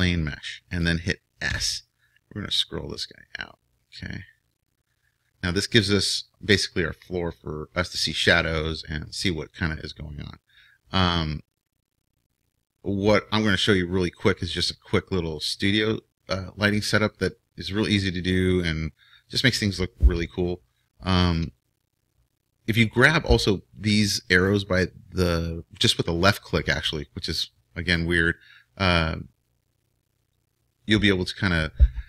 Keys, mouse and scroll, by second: 1.5 s, 19.3 right click, 19.9-32.0 drag.